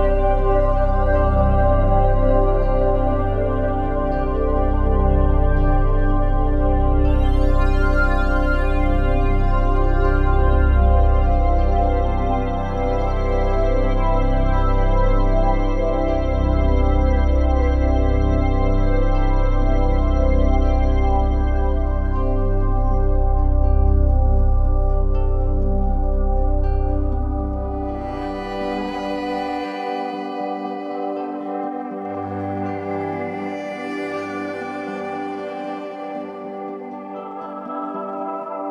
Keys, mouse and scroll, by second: 1.3 shift+click, 1.9-2.9 typing, 5.3-6.4 drag, 6.2-10.0 typing, 8.8 ctrl+a, 16.2-18.5 drag, 18.5-19.6 typing, 21.5 Tab, 22.9-27.5 alt+shift+drag, 27.5 Tab, 28.4 ctrl+a, 28.7 shift+\, 31.4 typing, 32.7-33.6 typing, 35.7 Tab, 36.4-37.1 typing, 37.7-38.7 drag, 38.3 Tab.